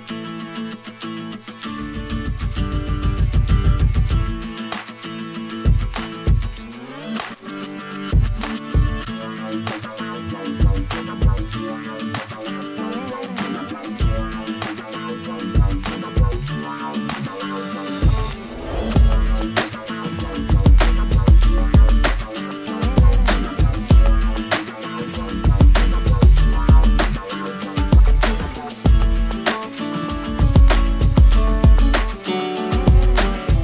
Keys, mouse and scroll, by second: 0.2 click, 0.7 middle click, 2.7 alt+middle click, 3.7-4.0 scroll, 4.5 alt+middle click, 5.0-5.7 alt+scroll, 7.0 click, 8.5 alt+middle click, 10.7 click, 11.4 middle click, 11.5 middle click, 11.5 middle click, 11.7 middle click, 12.0-13.0 scroll, 12.3 alt+middle click, 13.7 scroll, 14.7 click, 15.2 4, 15.4 Return, 16.6 alt+scroll, 18.2 ctrl+h, 21.3 click, 22.5 alt+scroll, 23.2 scroll up 3, 23.9 alt+middle click, 25.0 click, 25.6 click, 26.0 4, 26.2 Return, 27.0 scroll, 29.1 middle click, 30.0-31.3 drag, 31.4 click, 31.6-32.7 typing.